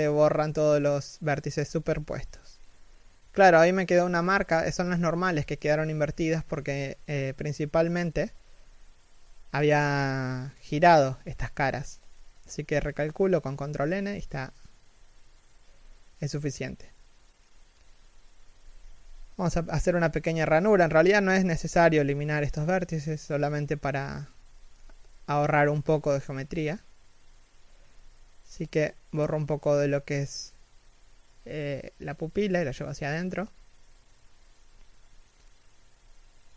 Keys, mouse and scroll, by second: 0.8-1.2 scroll down 1, 2.1 middle click, 5.3 a, 6.7 ctrl+n, 8.6 middle click, 11.6 3, 11.9 z, 12.5 middle click, 13.6 z, 14.0 scroll up 1, 14.5 a, 14.7 right click, 15.1 middle click, 15.8 x, 17.3 alt+right click, 18.3 x, 18.8-19.1 scroll down 1, 19.1 middle click, 22.6 alt+right click, 24.7 ctrl+=, 25.6 x, 27.2 l, 31.9 middle click, 33.1 z, 33.6 middle click, 35.1 z, 35.7 middle click.